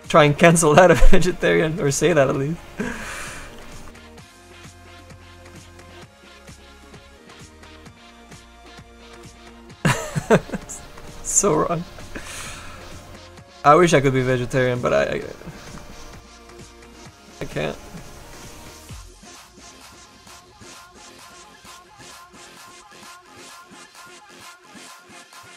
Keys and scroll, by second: 16.7 s.